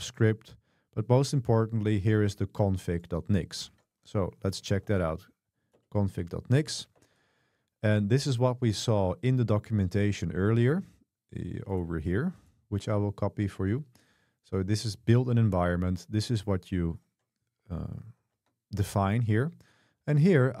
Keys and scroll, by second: 5.6-6.7 typing, 7.0 Escape, 10.1 super+1, 18.5 super+3, 20.0 k.